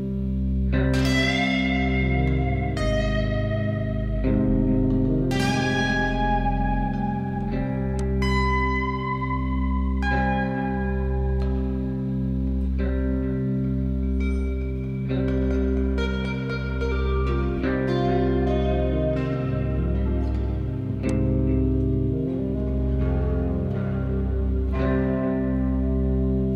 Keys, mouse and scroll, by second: 7.9-8.6 drag, 21.0 click, 25.7-26.5 scroll down 4.